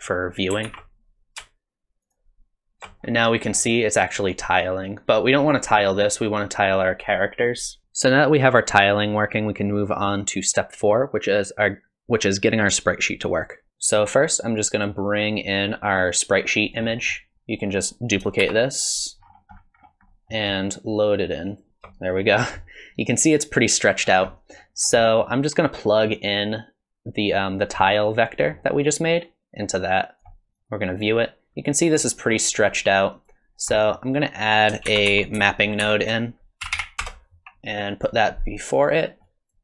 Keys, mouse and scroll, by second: 0.7 ctrl+x, 2.1 ctrl+shift+click, 3.0 scroll up 4, 3.5-4.7 scroll down 3, 7.8 middle click, 7.8 scroll down 2, 14.0 middle click, 16.7 click, 17.0 middle click, 17.3 click, 17.3 g, 18.4 shift+d, 19.3-21.5 scroll up 13, 20.1 middle click, 21.5 click, 21.7 ctrl+shift+click, 24.0 scroll down 5, 24.3 middle click, 24.8 scroll down 3, 25.1 middle click, 26.2 click, 27.8 middle click, 29.3 click, 30.6 click, 32.4 middle click, 33.1 click, 33.7 middle click, 34.5 click, 34.9 shift+a, 36.7 p, 39.2 click.